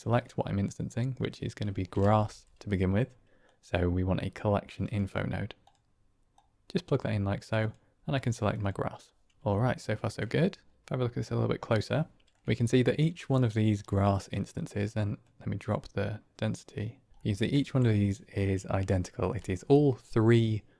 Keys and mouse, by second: 2.0 shift+a, 6.3-6.7 drag, 7.5-8.7 drag, 9.5-10.1 shift+middle drag, 10.8-11.7 ctrl+middle drag, 13.8 middle click, 15.3-16.5 drag, 16.5 middle click.